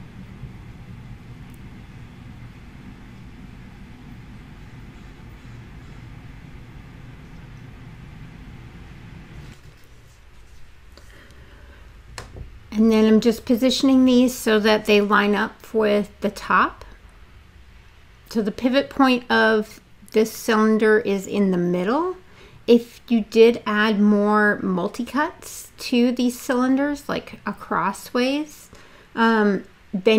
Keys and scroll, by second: 1.4 space, 7.4 r, 9.6 w, 16.1 e, 19.1 w, 29.7 e.